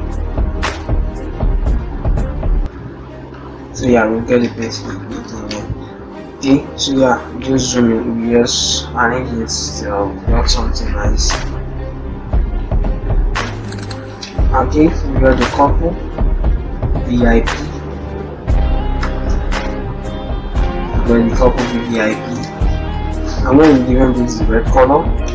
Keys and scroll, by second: 4.3 ctrl+Return, 5.3 shift+Left, 22.2 shift+Home.